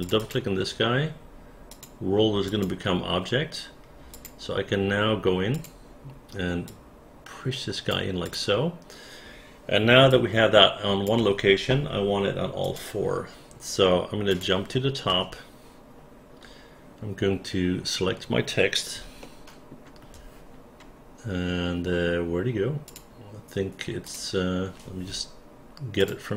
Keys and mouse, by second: 0.0 click, 0.2 click, 1.7 click, 2.4 click, 4.1 click, 5.5 click, 6.6-7.9 drag, 8.2 click, 10.1 alt+click, 14.3 click, 15.1 space, 19.2 alt+middle click, 22.8 click, 24.0 click, 26.0 click.